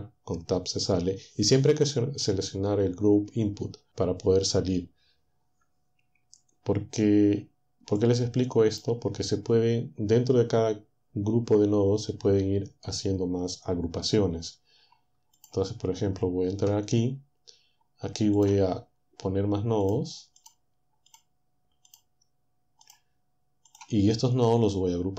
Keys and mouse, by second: 8.0-15.6 drag, 16.5 Tab, 19.9 click, 20.4 click, 21.1 click, 21.9 click, 22.9 click, 23.7 click.